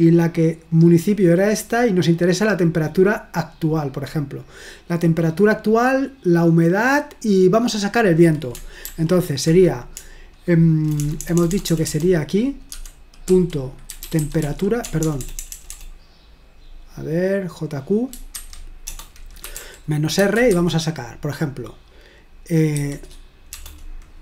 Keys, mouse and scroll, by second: 0.2-0.7 scroll up 1, 2.9-3.4 scroll down 1, 3.9 click, 4.6-5.1 scroll down 1, 7.7 click, 8.9 ctrl+p, 10.0-11.9 typing, 13.7-15.5 typing, 18.3-20.7 typing, 22.9-23.6 typing.